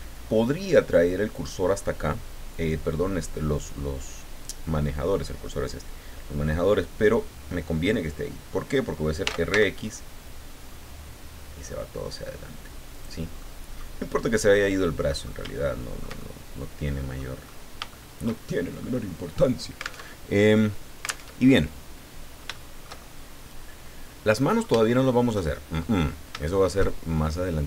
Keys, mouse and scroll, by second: 9.2 r, 9.5 x, 12.9 click, 13.4 middle click, 14.8 middle click, 15.5-17.3 shift+middle drag, 17.4-18.2 scroll up 2, 17.9 shift+middle click, 18.5 shift+middle click, 20.0 alt+Tab, 21.2 alt+Tab, 21.9 scroll down 2, 22.5-24.4 shift+middle drag, 24.7 shift+middle click, 24.9 shift+middle click, 26.0-26.3 shift+scroll up 1, 26.4 shift+middle click.